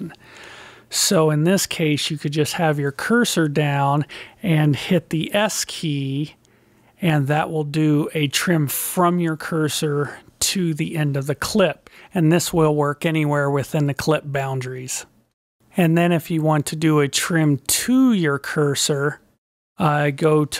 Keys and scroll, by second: 6.0 s.